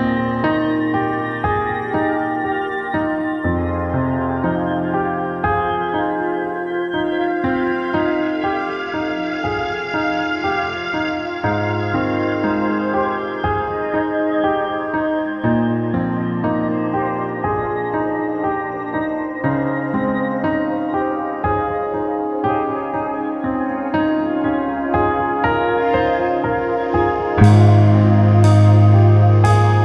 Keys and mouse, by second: 1.9 click, 2.4-3.6 drag, 8.1-9.9 drag, 14.6 click, 15.4 middle click, 16.1-20.0 drag, 17.2 g, 20.0 shift+a, 21.3 shift+a, 23.5 s, 26.7-28.4 drag, 28.4 s.